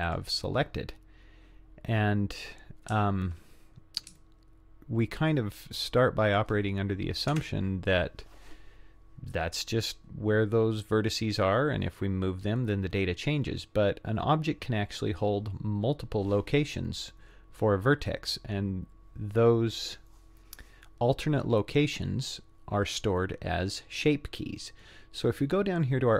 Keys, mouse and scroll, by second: 0.1 click, 0.6-1.6 scroll down 6, 1.7 scroll up 1, 4.2-6.4 shift+middle drag, 7.3 Tab, 15.5-17.8 scroll up 1, 17.8-18.9 scroll down 1.